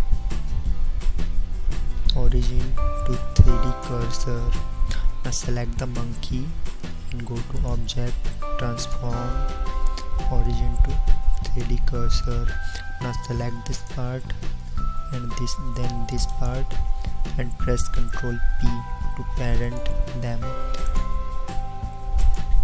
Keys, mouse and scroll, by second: 20.6 ctrl+p.